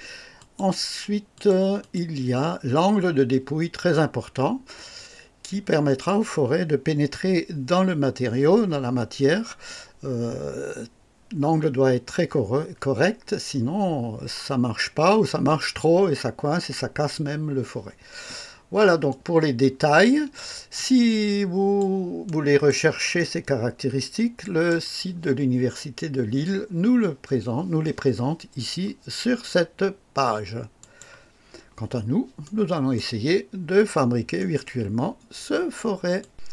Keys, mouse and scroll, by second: 0.4 click, 1.3 click, 1.8 click, 19.1-20.5 drag, 20.7-21.9 drag, 22.2 right click, 24.4 click, 30.8 click, 32.4-33.1 right drag, 34.4 right click, 36.2 click.